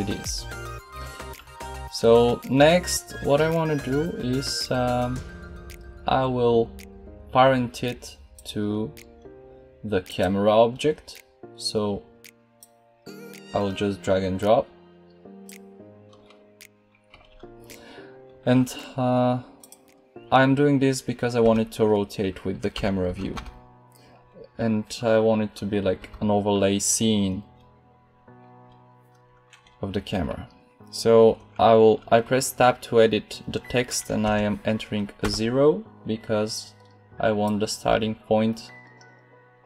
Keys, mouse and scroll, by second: 8.3-15.4 middle drag, 21.3 Tab, 22.7 BackSpace, 23.0 BackSpace, 23.3 BackSpace, 25.9 BackSpace, 34.1 0, 35.1 Tab, 37.3 right click, 38.4 right click, 39.2 click.